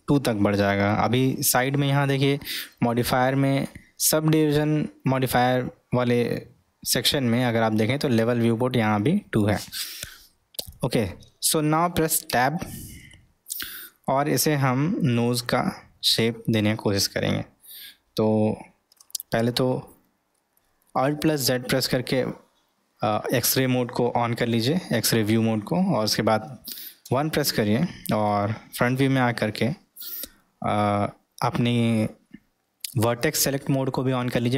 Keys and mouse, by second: 0.0-0.7 middle drag, 12.3 Tab, 13.1-14.1 middle drag, 14.5 middle click, 20.1 alt+z.